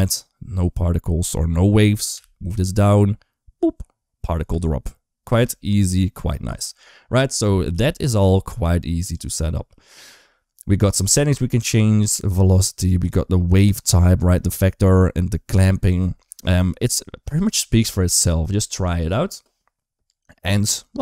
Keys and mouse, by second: 1.9 g, 4.3 space, 5.1 space, 6.2 space, 7.6 g, 10.8 click, 12.8 click.